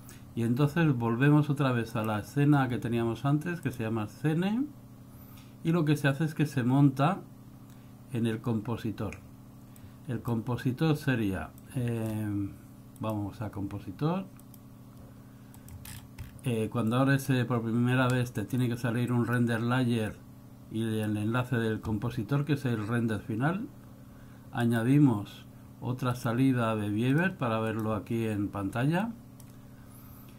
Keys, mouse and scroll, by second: 2.1 click, 9.9 click, 11.6 click, 13.1 click, 15.6 click, 16.0-16.5 scroll down 11, 17.0 click, 18.1 scroll up 3, 18.7 click, 20.2 click, 24.7 click, 29.2 click.